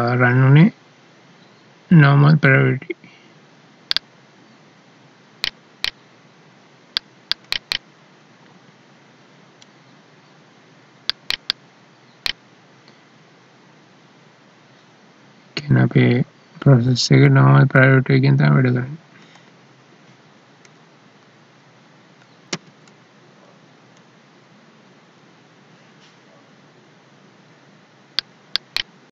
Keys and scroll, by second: 22.7 alt+e.